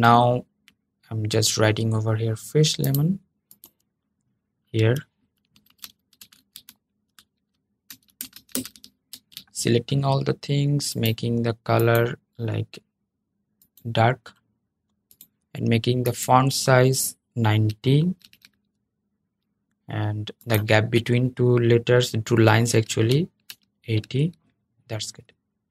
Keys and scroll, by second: 8.8 super+a.